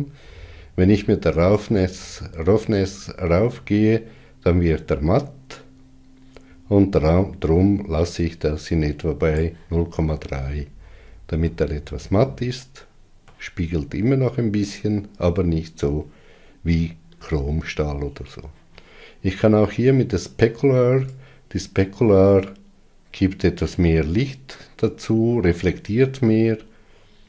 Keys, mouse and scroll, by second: 3.7-5.4 drag, 12.4-22.3 middle drag, 22.3-25.1 drag.